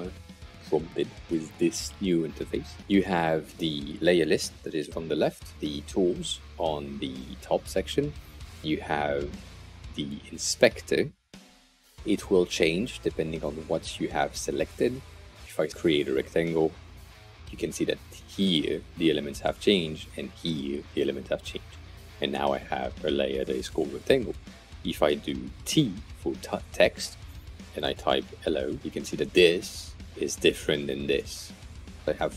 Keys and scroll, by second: 15.4 r, 25.2 t, 27.5-28.9 typing.